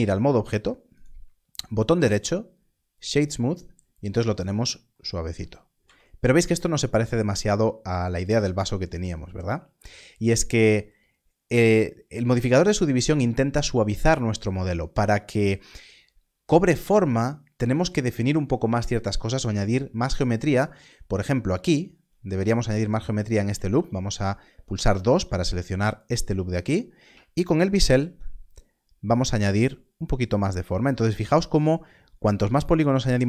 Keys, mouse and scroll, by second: 0.5 Tab, 0.9 Tab, 0.9 right click, 2.9 click, 5.7 Tab, 21.1 Tab, 21.5 alt+click, 25.8 alt+click, 27.7 ctrl+b, 30.3-32.5 scroll up 1.